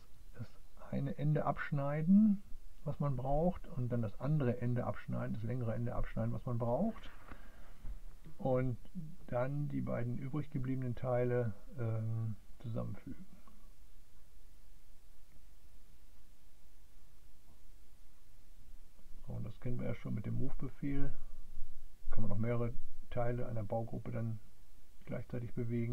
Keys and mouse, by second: 0.5 click, 2.1 click, 3.1 click, 4.8 click, 7.1 click, 9.1-12.4 drag, 14.7 click, 17.7 click, 18.9-20.0 drag, 22.0 click, 23.3 click, 23.8 click, 24.8 click.